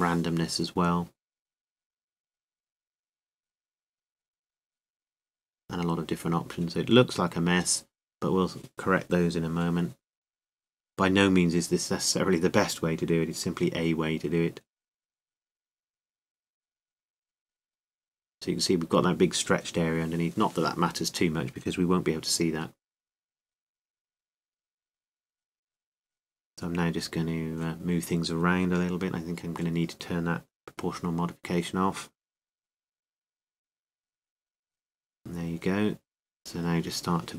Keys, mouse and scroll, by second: 3.2 r, 7.5-10.0 drag.